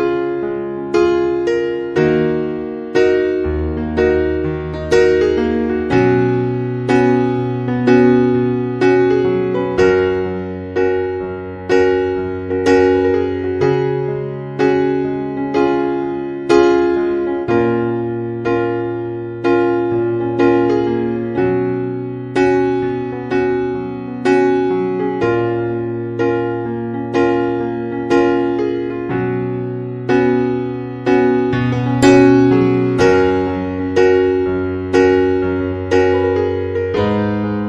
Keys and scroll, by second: 10.0 Escape, 33.6 3, 33.9 Return.